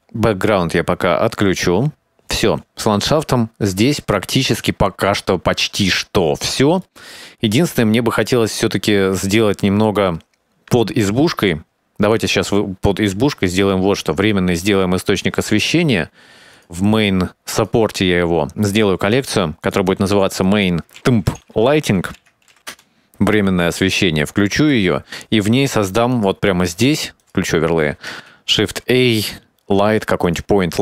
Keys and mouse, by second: 1.7 click, 3.6 ctrl+s, 6.1-7.1 shift+middle drag, 12.2 click, 14.7 click, 16.7 click, 17.4 click, 18.6 click, 19.1 click, 19.2-23.3 drag, 25.0 click, 26.3 click, 27.4 click, 28.5 shift+s.